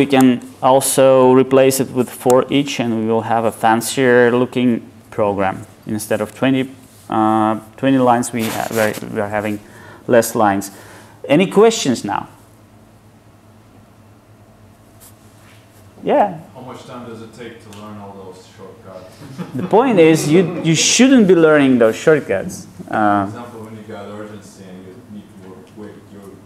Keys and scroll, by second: 0.2 alt+Return.